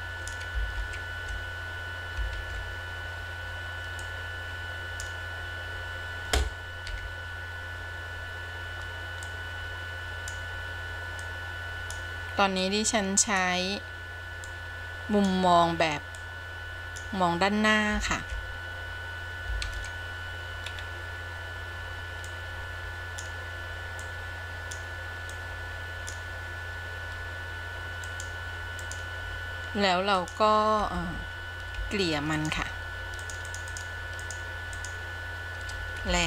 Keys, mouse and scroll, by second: 1.8 ctrl+z, 3.3 ctrl+z, 4.3-5.3 drag, 7.1 KP_1, 9.4-10.6 drag, 11.4 click, 12.8-13.7 drag, 14.6-15.5 drag, 16.4 click, 19.1 ctrl+z, 20.6 ctrl+z, 20.9-22.1 scroll up 2, 22.4-23.5 drag, 24.2 click, 25.6-26.4 drag, 28.1 click, 30.3 click, 31.9 f, 32.5 f, 33.5 click, 33.7 click, 34.0 click, 34.5 click, 35.0 click.